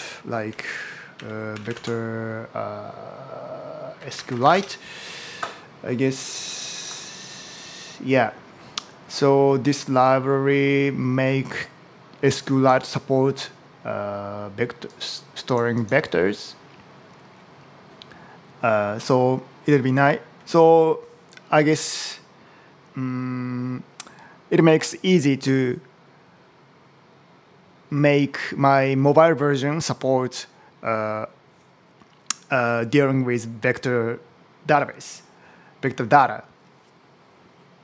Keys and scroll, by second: 0.0-2.0 typing, 3.6-4.8 typing.